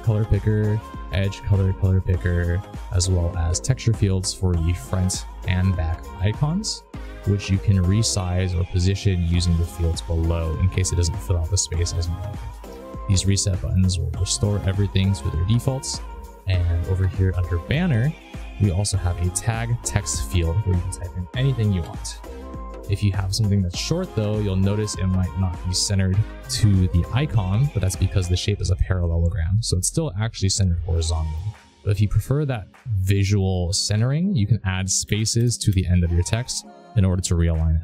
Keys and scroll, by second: 21.0-22.2 typing, 34.8 space, 35.1 space, 35.4 space.